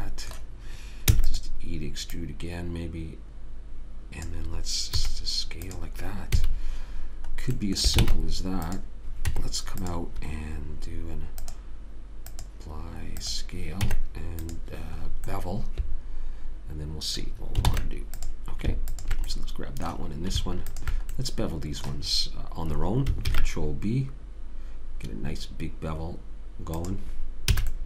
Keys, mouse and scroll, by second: 1.4 e, 2.5 click, 5.4 s, 6.7 a, 8.4 ctrl+Tab, 9.7 Tab, 14.2 Tab, 18.0 ctrl+Tab, 19.3 click, 21.5 click, 23.6 ctrl+b.